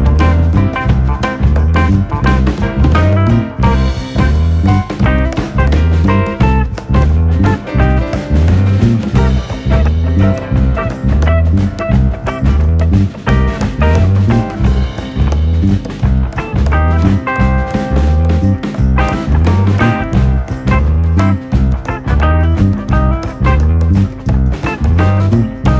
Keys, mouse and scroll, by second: 1.4 Tab, 2.1-3.1 drag, 3.6-4.2 scroll down 3, 4.2 s, 5.4-5.9 scroll up 4, 5.9 shift+middle click, 6.2 scroll up 1, 6.4 s, 7.5-7.8 scroll up 1, 7.8 s, 8.9-9.3 scroll up 1, 9.3 KP_Decimal, 9.6 scroll down 4, 9.7 middle click, 10.3 click, 11.0 i, 12.5 KP_1, 12.7 scroll down 1, 13.1 shift+middle click, 13.6 e, 15.4 click, 15.9 e, 16.8 click, 17.2 s, 17.9 click, 19.7 l, 20.1 m, 21.5 click, 22.4 l, 22.6-23.5 scroll down 1, 23.8 r, 24.9 g.